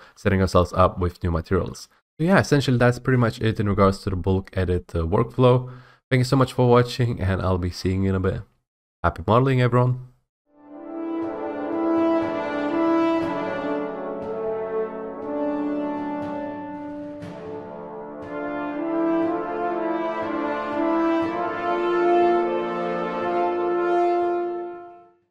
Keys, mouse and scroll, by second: 0.0-1.8 typing, 0.7 scroll, 1.9 right click, 6.3-7.3 typing, 7.3-8.7 right drag.